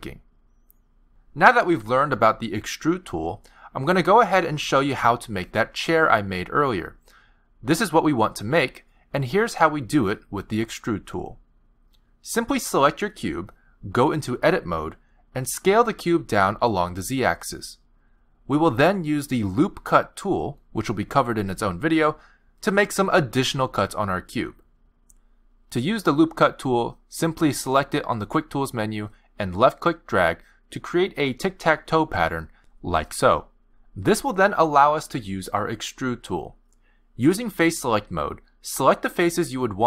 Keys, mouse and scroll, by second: 1.2 ctrl+right click, 2.1 ctrl+right click, 13.4 click, 15.2 click, 17.3 click, 18.4 click, 20.8 click, 29.5 click, 30.9 click, 32.2 click, 33.7 click, 35.8 click, 37.0-38.5 scroll up 6, 38.5 click, 39.1 middle click.